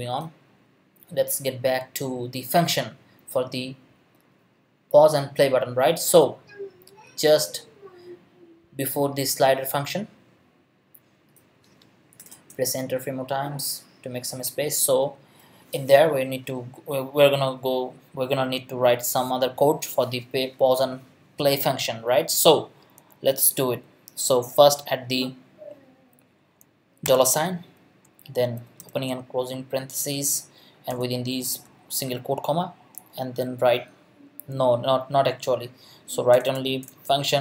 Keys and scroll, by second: 12.2 Return, 13.1 Up, 27.0 shift+4, 28.3-29.3 typing, 30.2 Left, 30.9 ', 31.6 Left, 35.4 Right, 36.3 BackSpace.